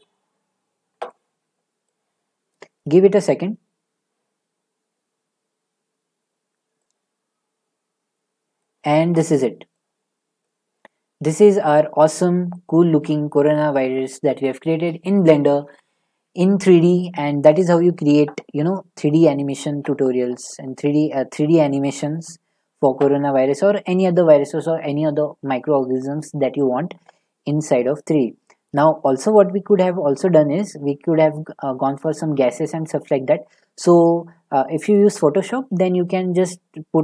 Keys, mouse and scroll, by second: 2.5 click, 9.7 middle click, 10.4 click, 11.2 click, 12.9 shift+middle click.